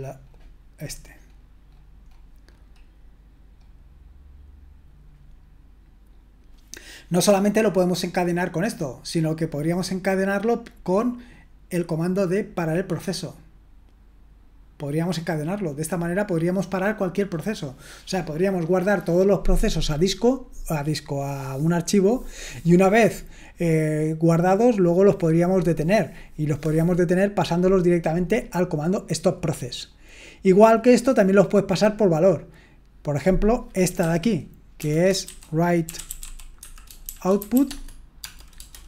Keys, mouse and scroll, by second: 5.6-11.3 scroll down 1, 11.3-17.4 drag, 28.9-29.4 scroll down 1, 29.4-33.4 scroll down 1, 33.4 click, 34.0 typing, 35.2-38.2 typing, 37.6 Tab.